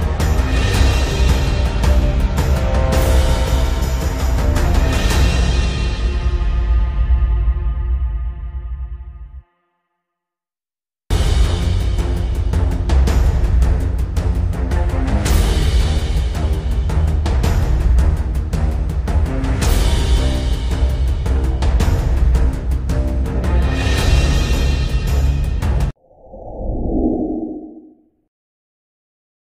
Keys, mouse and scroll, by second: 0.7-2.3 drag, 3.3 shift+m, 4.1-6.2 drag, 7.4-8.0 alt+drag, 9.4 alt+scroll up 1, 11.3 alt+scroll down 1, 12.3 v, 12.8 click, 13.4 alt+scroll down 1, 14.8 click, 17.8 ctrl+0, 18.4 scroll down 1, 18.7 scroll up 1, 20.3 click.